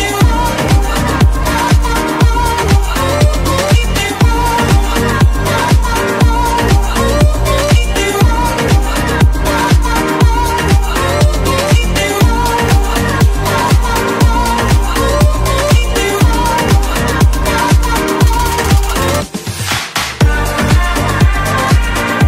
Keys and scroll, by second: 6.0 Escape.